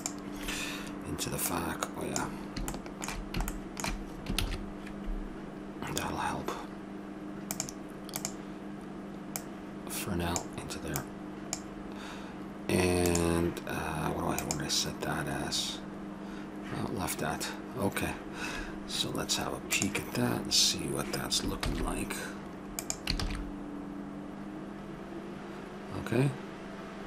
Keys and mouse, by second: 0.7-2.7 drag, 2.7 middle click, 4.4 shift+a, 9.3-12.6 drag, 13.1 click, 23.3 shift+z.